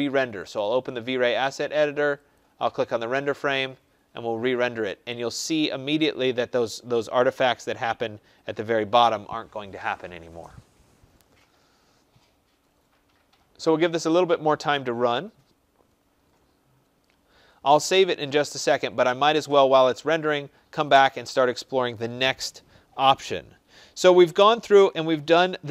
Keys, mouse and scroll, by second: 0.5 click, 2.3 click, 20.8 click.